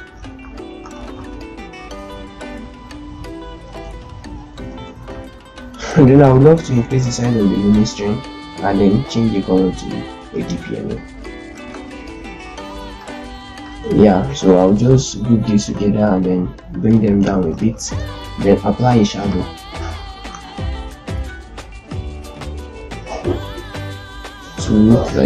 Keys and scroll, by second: 1.9 shift+Down, 2.5 shift+Down, 3.2 shift+Down, 3.7 shift+Down, 4.2 shift+Down, 11.8 ctrl+space, 12.3 ctrl+space, 15.5 ctrl+shift+g, 15.6 Down, 15.8 Down, 16.0 Down, 16.1 Down, 16.4 Down, 16.6 Down.